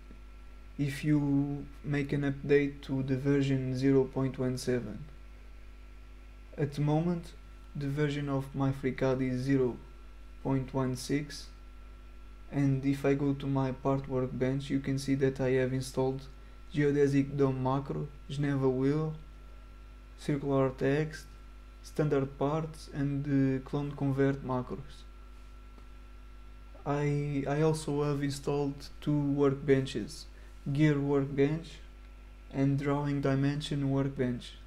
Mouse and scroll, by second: 7.7 click, 11.2 click, 12.9 click, 27.7 click, 29.2 middle click, 32.8 middle click.